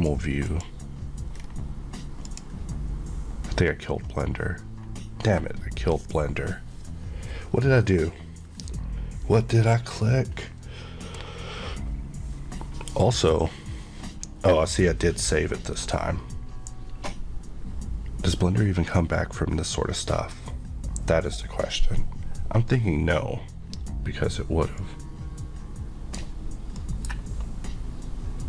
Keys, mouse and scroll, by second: 1.3 scroll down 1, 2.2 click, 4.0-8.7 scroll, 24.9 scroll up 1.